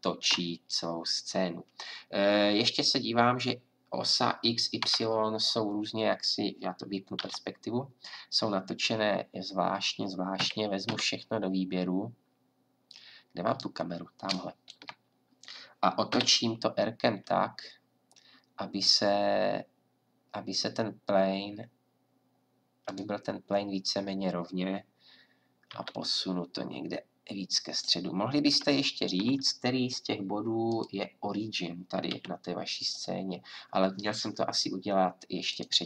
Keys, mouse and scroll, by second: 2.0-4.8 drag, 4.8 KP_7, 7.1 KP_5, 10.4 a, 10.8 a, 16.1 r, 25.7 g, 28.2-30.7 drag, 30.7-32.1 middle drag, 32.1 a, 32.8 middle click, 32.9-35.2 drag, 35.6-35.8 drag.